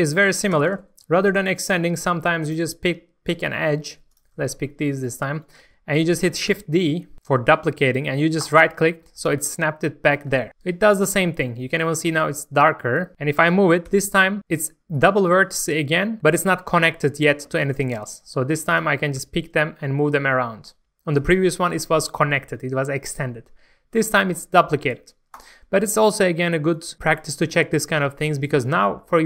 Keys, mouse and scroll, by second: 0.2-0.5 scroll up 1, 0.5 Tab, 1.0 middle click, 1.8 middle click, 2.4 click, 4.1 ctrl+shift+click, 4.6 scroll up 1, 5.0 shift+middle click, 6.5 shift+d, 8.4 right click, 9.2 middle click, 10.4 alt+a, 10.5 middle click, 11.7-12.0 scroll up 1, 12.1 shift+middle click, 13.1 click, 13.9 g, 14.9 right click, 18.6 shift+click, 19.1 shift+g, 25.4 right click, 28.0-28.5 scroll down 1, 28.5-29.0 scroll up 1, 29.1 shift+middle click.